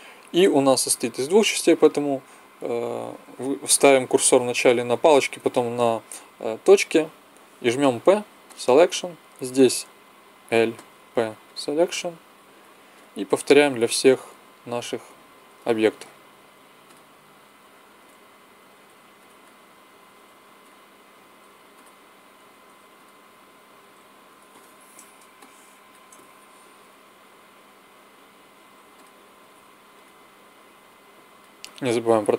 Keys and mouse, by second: 0.0 l, 0.6 l, 7.7 p, 9.7 l, 10.8 p, 12.0 l, 12.4 p, 13.3 l, 13.6 p, 14.7 l, 15.1 p, 16.1 l, 16.4 p, 17.2 l, 17.4 p, 18.5 l, 18.7 p, 19.9-23.8 typing, 27.2 l, 28.4 p, 29.3 l, 29.4 p, 30.5 l, 30.8 p, 31.7 l, 32.0 p.